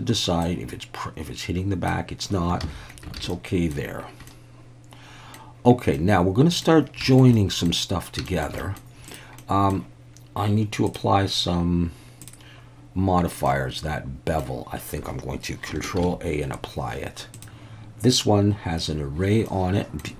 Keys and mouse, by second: 0.5-1.9 drag, 2.6 ctrl+z, 3.2 alt+a, 3.3 middle click, 4.3-5.3 middle drag, 5.9-6.6 middle drag, 7.1 shift+middle click, 7.3 middle click, 8.2 shift+middle click, 8.6 middle click, 9.1 drag, 9.4-9.7 middle drag, 10.9 click, 13.5-14.4 middle drag, 16.0 ctrl+a, 19.5-20.0 middle drag.